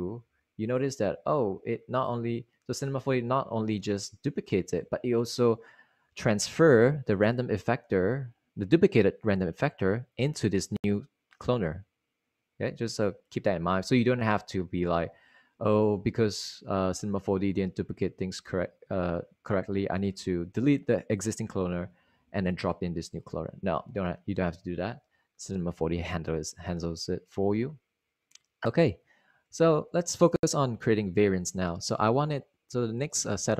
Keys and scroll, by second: 0.0-0.2 typing.